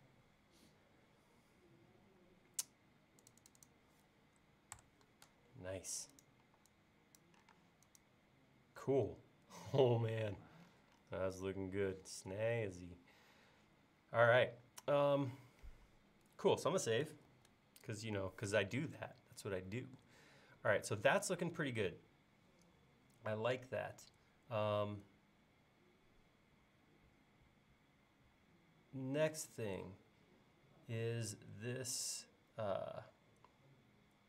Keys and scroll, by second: 4.8 BackSpace, 6.5 e, 7.6 space, 17.3 super+s.